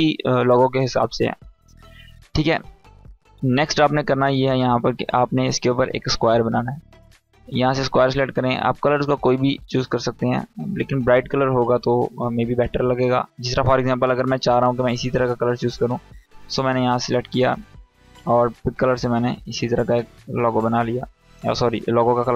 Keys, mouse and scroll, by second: 2.2-5.5 drag, 5.7-10.1 drag, 11.7 scroll up 1, 16.2 click.